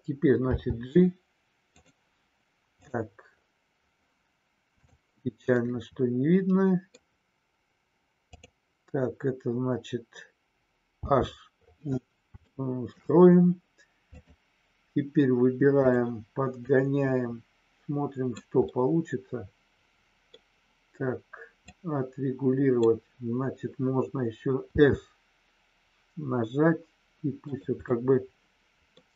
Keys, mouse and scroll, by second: 0.4 g, 4.8 click, 5.6 scroll up 1, 5.7-6.9 middle drag, 8.3 click, 12.4 shift+middle click, 14.0 click, 16.7-18.3 drag, 18.6-20.3 middle drag, 21.6-22.8 drag, 27.4 click, 27.8-28.8 middle drag, 28.8 scroll down 1.